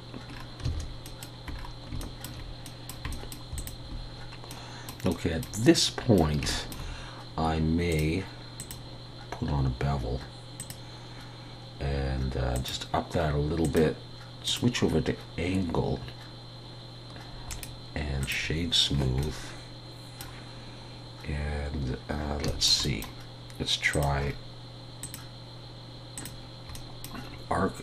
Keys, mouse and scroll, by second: 0.6 scroll down 6, 0.7 alt+a, 1.0 middle click, 1.5 scroll down 1, 2.0 shift+middle click, 2.7 middle click, 3.1 middle click, 3.4 shift+middle click, 3.6 click, 4.5 middle click, 6.5 shift+middle click, 7.9 click, 12.5 click, 17.5 right click, 18.9-19.4 scroll down 2, 19.2 middle click, 22.2 scroll down 1, 22.5 shift+middle click, 22.8 middle click, 23.9 click, 24.2 scroll down 1, 25.0 click, 25.0-25.4 scroll down 2, 26.7 middle click.